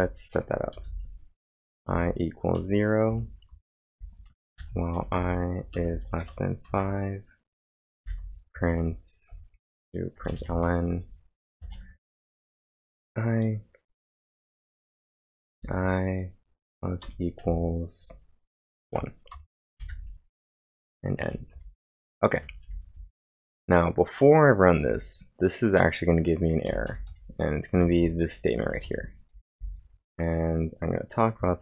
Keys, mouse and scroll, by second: 0.0-2.6 typing, 3.1 Return, 3.5 Return, 3.6-6.2 typing, 6.7 Return, 7.5-8.7 typing, 10.2-12.0 typing, 12.7 Return, 14.7 l, 15.5 space, 16.7 shift+=, 17.5 space, 18.9-20.4 typing, 19.3 Return, 21.5-24.8 typing, 26.7 j, 29.1-29.8 typing.